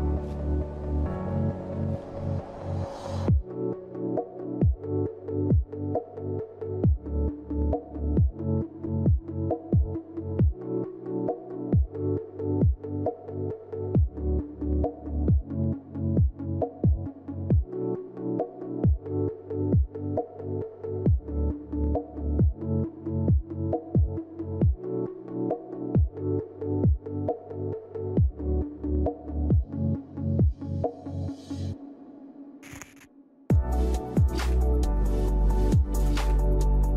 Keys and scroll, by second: 1.2-3.5 typing, 5.8-7.3 typing, 8.9 typing, 11.4 ctrl+g, 28.2-28.5 typing, 30.9 ctrl+shift+g.